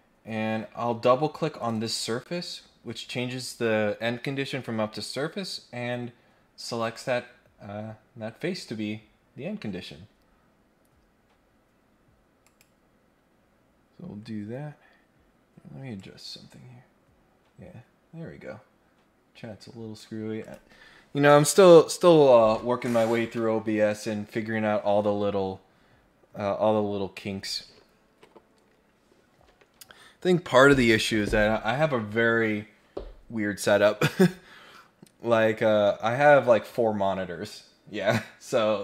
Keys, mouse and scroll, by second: 1.6 click, 1.7 click, 6.8 middle click, 12.4 click, 15.9-20.0 drag, 20.4 click.